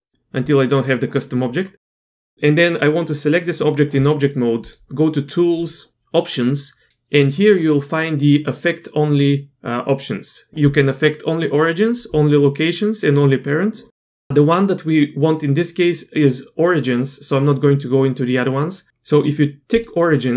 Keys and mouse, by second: 0.1 Tab, 4.7 click, 5.5 click, 19.7 click.